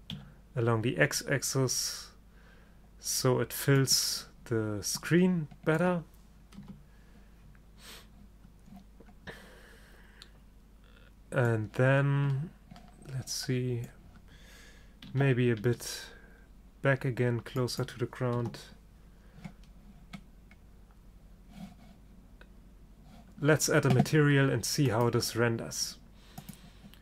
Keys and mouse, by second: 6.7 KP_0, 11.9-15.2 middle drag, 15.2 g, 18.5 KP_0, 25.0-27.0 drag.